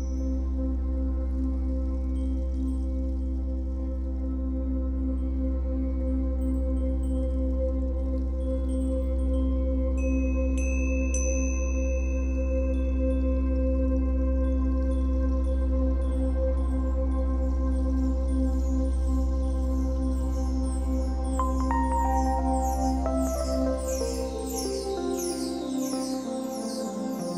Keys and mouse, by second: 4.1 g, 5.3 middle click, 6.1-7.6 middle drag, 7.6-13.9 drag, 14.8 g, 15.5 middle click, 16.1-18.4 middle drag, 21.0 g.